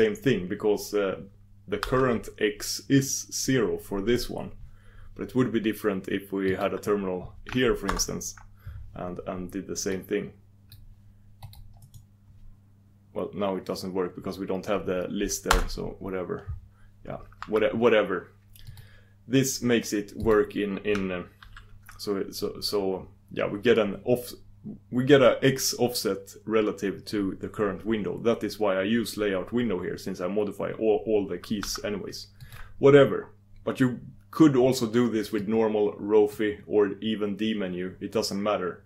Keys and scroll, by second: 7.9 ctrl+super+Return.